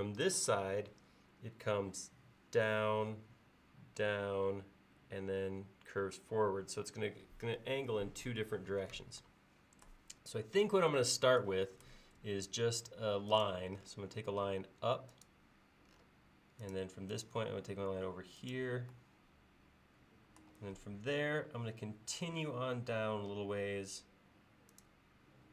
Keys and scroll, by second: 12.2 l.